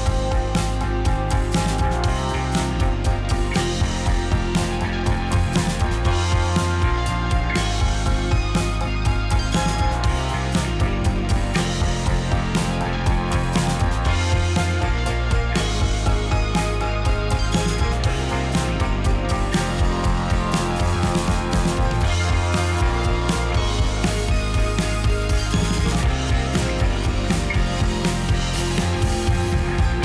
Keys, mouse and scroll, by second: 0.1-2.4 middle drag, 2.7 Tab, 3.2 click, 3.4 click, 3.6-4.8 drag, 5.8 Tab, 6.6-11.5 drag, 11.5-12.7 middle drag, 12.7-14.3 drag, 15.5-16.7 drag, 17.8 click, 18.1-20.8 middle drag, 20.8 click, 21.2 middle click, 21.8 g, 26.1 g, 27.3 click, 27.5-28.6 middle drag, 28.6 click, 29.7 g.